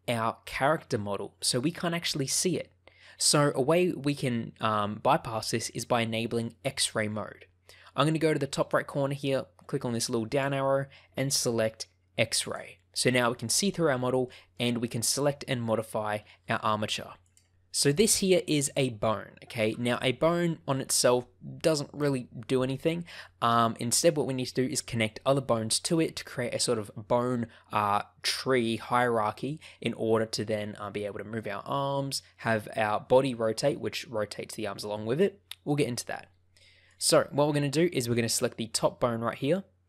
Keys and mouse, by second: 10.4-12.7 drag, 14.2 shift+middle click, 17.3 click, 36.8 click, 39.4 shift+middle click.